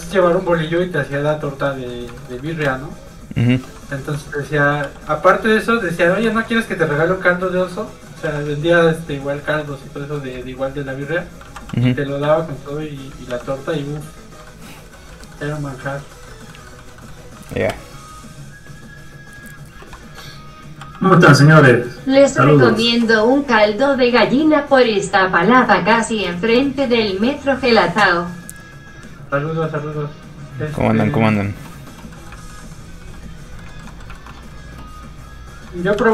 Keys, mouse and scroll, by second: 0.0 Tab, 0.4 middle click, 1.8 scroll up 2, 2.2 shift+middle click, 2.4 middle click, 2.7 shift+space, 3.6 shift+click, 3.9 middle click, 4.2 shift+middle click, 4.5 middle click, 4.6 middle click, 4.9 f, 5.1 click, 5.2 ctrl+click, 6.1 click, 6.2 middle click, 6.3 shift+middle click, 6.5 shift+scroll up 1, 6.6 middle click, 7.2 ctrl+click, 7.7 click, 7.8 middle click, 8.3 f, 8.6 ctrl+click, 9.7 click, 9.8 middle click, 10.5 ctrl+click, 11.4 ctrl+z, 11.8 f, 11.9 click, 12.4 ctrl+click, 13.3 ctrl+z, 13.6 middle click, 14.1 ctrl+click, 14.5 click, 14.6 middle click, 15.2 shift+middle click, 15.4 middle click, 15.5 middle click, 16.8 shift+middle click, 17.4 scroll down 1, 17.6 shift+middle click, 17.7 shift+space, 20.2 space, 20.3 f, 20.6 click, 20.8 f, 21.0 click, 21.2 middle click, 24.2 middle click, 24.3 click, 32.2 middle click, 32.4 shift+middle click, 32.6 middle click, 32.7 middle click, 32.8 scroll up 1, 33.0 f, 33.2 click, 33.6 middle click, 33.7 shift+middle click, 36.0 ctrl+z.